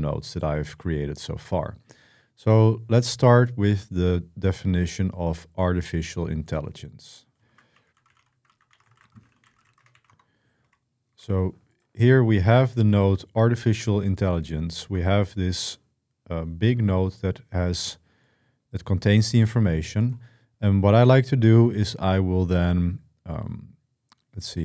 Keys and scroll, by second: 7.0-10.9 typing.